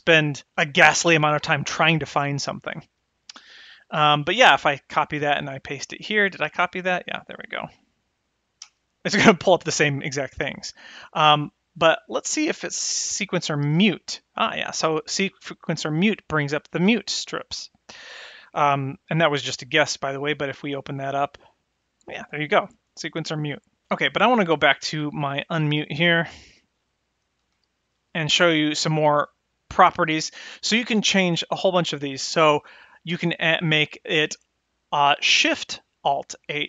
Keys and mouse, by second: 0.0-5.2 drag, 5.6-8.9 drag, 10.7-21.2 drag, 13.6 BackSpace, 21.4 click, 24.5-33.3 drag, 35.3 click.